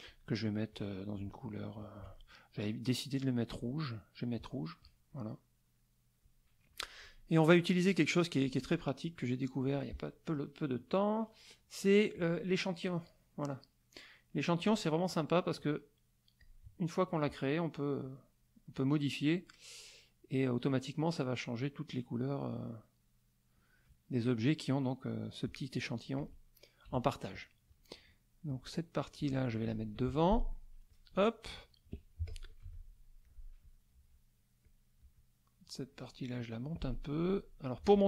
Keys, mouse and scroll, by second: 0.7 click, 1.4 shift+click, 1.7 shift+click, 3.5 click, 5.3 middle click, 9.6 click, 12.1 click, 16.4 click, 18.0-23.7 drag, 25.9 click, 26.8 KP_Subtract, 27.4 middle click, 28.5 click, 29.3 shift+click, 29.9 shift+F1, 30.9 click, 31.5 click, 32.2 z, 32.2 click, 32.6 F2, 33.2 click, 33.9 click, 34.6 click.